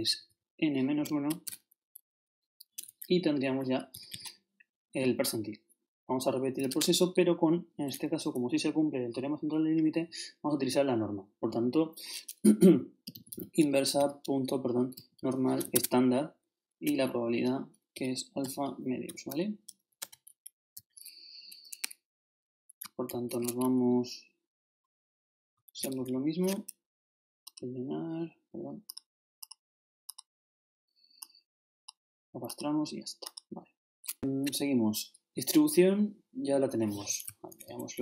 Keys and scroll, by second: 1.3 shift+-, 2.7 shift+Return, 3.5 shift+Up, 3.9 shift+Right, 6.7 shift+0, 12.9-15.2 typing, 15.7 shift+Tab, 18.4 shift+7, 20.0 shift+Return, 20.7 shift+Up, 23.1 shift+Right, 26.0 shift+Right, 34.1 shift+Up, 37.5 ctrl+shift+Right.